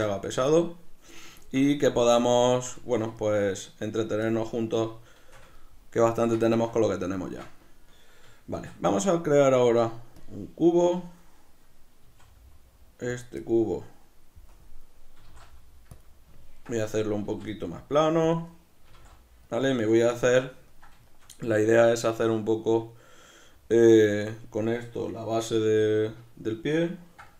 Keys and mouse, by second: 0.3 b, 0.5 Tab, 1.4 shift+middle click, 5.5 ctrl+middle click, 8.6 shift+a, 12.0 s, 13.2 click, 13.4 middle click, 14.5 KP_Decimal, 15.2 s, 16.0 click, 16.1 middle click, 16.7-18.4 middle drag, 17.2 s, 18.4 click, 18.5-19.6 middle drag, 18.9 s, 19.6 click, 20.1-27.3 shift+middle drag.